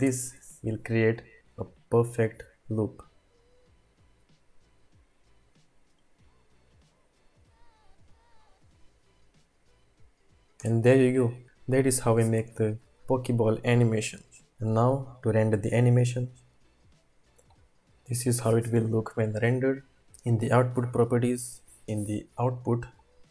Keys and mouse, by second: 0.0 space, 11.9 space.